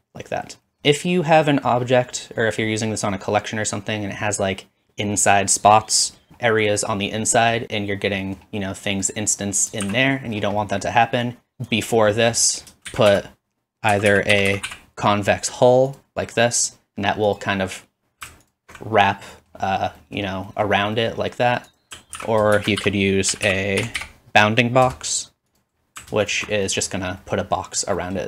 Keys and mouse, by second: 1.3 click, 1.7 click, 3.9-8.4 drag, 6.3 shift+z, 9.8 shift+z, 12.9 shift+a, 17.4-19.1 drag, 17.5 typing, 22.2 ctrl+x, 22.5 shift+a, 24.7-26.5 drag, 26.5-28.2 middle drag.